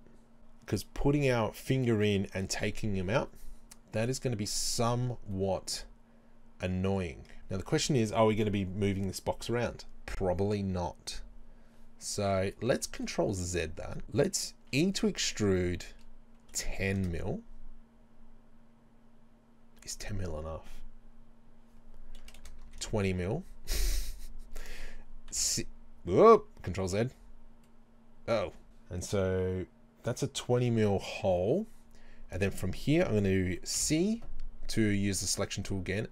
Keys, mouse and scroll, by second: 13.3 ctrl+z, 14.7 e, 18.1 e, 33.8 c.